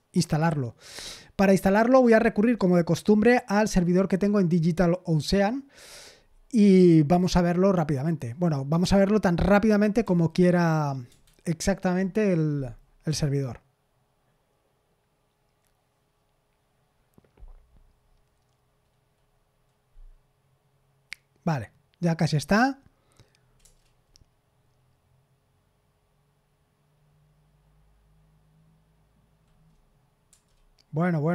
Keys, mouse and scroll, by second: 10.0 f, 11.0 BackSpace, 23.6 Return, 30.2 Return.